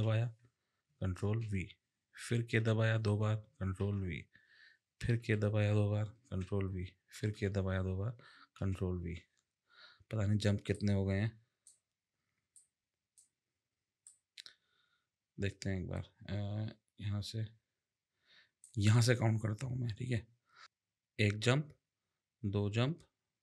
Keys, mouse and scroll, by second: 1.2 ctrl+v, 2.3 k, 2.5 k, 3.8 ctrl+v, 5.2 k, 6.2 ctrl+v, 7.1 k, 7.3 k, 8.6 ctrl+v, 10.7 click, 12.5 click, 14.1 click, 20.6 click.